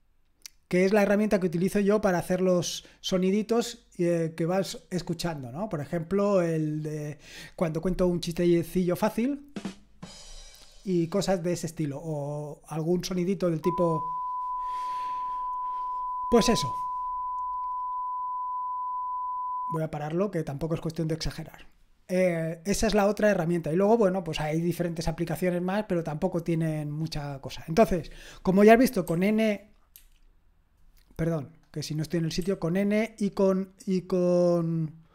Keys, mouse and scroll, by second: 3.1-4.7 drag, 29.9 typing, 31.5-35.1 drag.